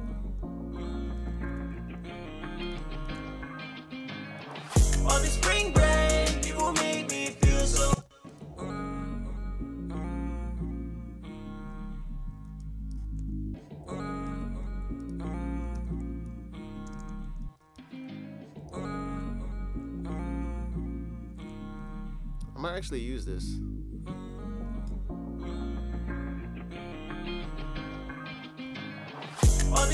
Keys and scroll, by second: 1.4 F2, 1.5 F1, 2.7 b, 15.7 super+s, 17.7 e, 18.6 super+s, 21.7 super+Tab, 22.4 super+Tab, 22.6 super+Tab.